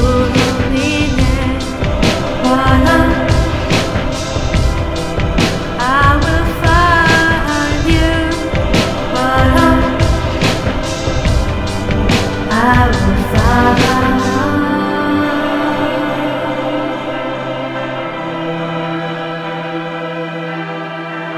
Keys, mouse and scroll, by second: 1.0 ctrl+alt+p, 4.4 click, 7.0 click, 10.9 click, 12.2 ctrl+alt+p, 14.3 click, 15.7 click, 17.5-18.7 scroll down 4, 21.2 click.